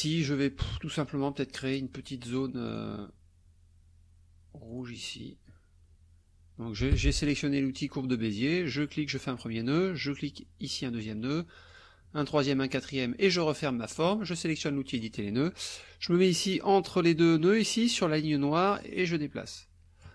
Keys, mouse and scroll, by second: 2.7 click, 4.7 click, 6.9 Escape, 7.7 click, 9.1 click, 10.6 click, 11.7 click, 12.3 click, 13.2 click, 14.9 click, 18.9-20.1 drag.